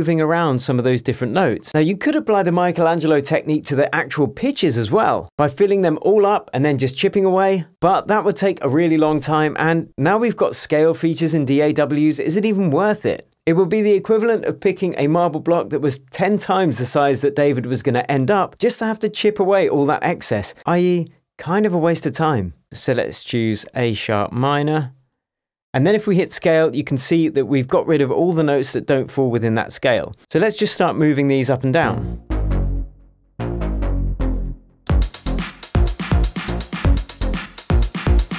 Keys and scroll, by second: 30.4 p, 32.3 Down, 33.6 Down, 34.8 space.